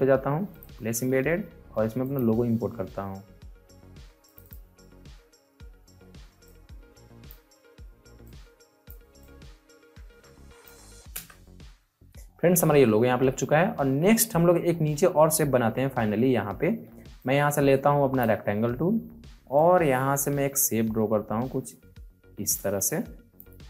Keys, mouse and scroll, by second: 11.1 Return, 12.2 alt+scroll up 1, 12.6 alt+scroll down 1, 14.0 scroll down 1, 14.6 alt+scroll up 1, 15.0 scroll down 1, 15.5 scroll down 2, 17.1-23.6 drag.